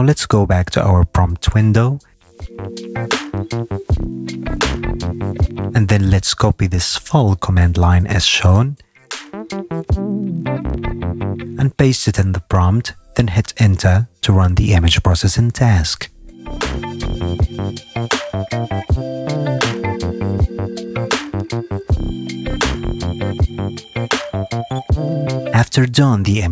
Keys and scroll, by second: 16.2 Return.